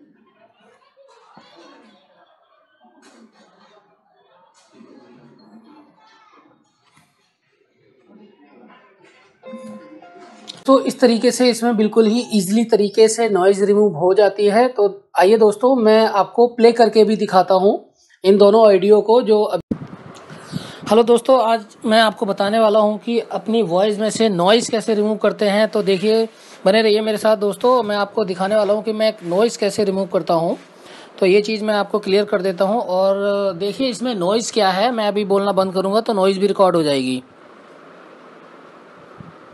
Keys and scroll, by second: 0.9-3.0 typing.